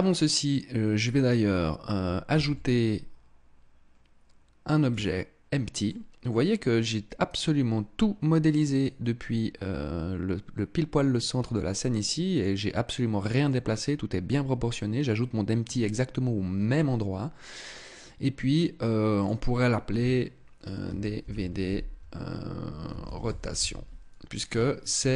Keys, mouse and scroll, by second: 1.8 shift+a, 5.3 middle click, 11.0 middle click, 18.7 click.